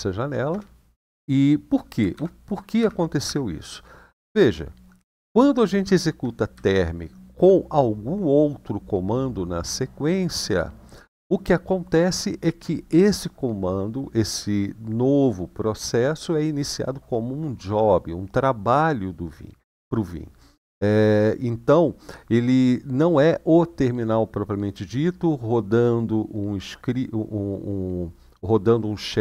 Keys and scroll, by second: 0.2 typing, 1.9 :, 2.5 Up, 3.0 Up, 4.9 Left, 5.5 Left, 5.7 Left, 6.3 Right, 6.9 Right.